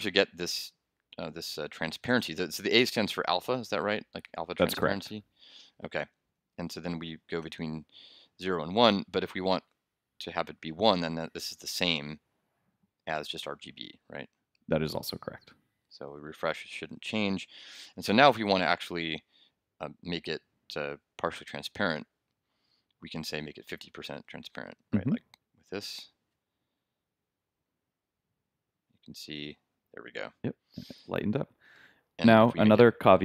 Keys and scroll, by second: 6.3 super+Right, 6.6 super+Left, 10.9 super+s, 16.1 super+r, 17.9 super+Tab, 25.9 super+s, 29.2 super+r, 32.0 super+Tab.